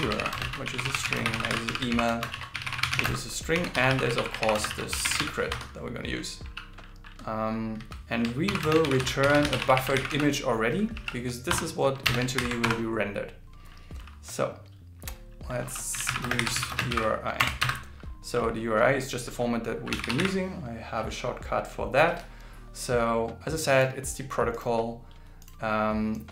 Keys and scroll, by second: 0.2 shift+., 0.6 shift+s, 1.9 shift+., 2.1 shift+space, 2.3 shift+s, 4.4 shift+., 4.7 shift+s, 8.5 shift+., 8.8 shift+b, 11.0 shift+i, 12.4 alt+8, 16.9 shift+ß.